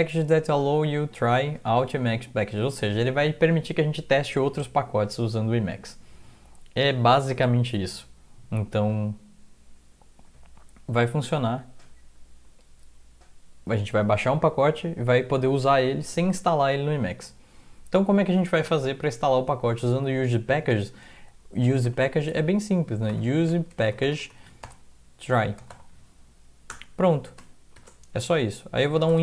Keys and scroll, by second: 18.5 alt+Tab, 21.9-26.2 typing, 22.6 Left, 26.7 Return, 27.7-29.2 typing.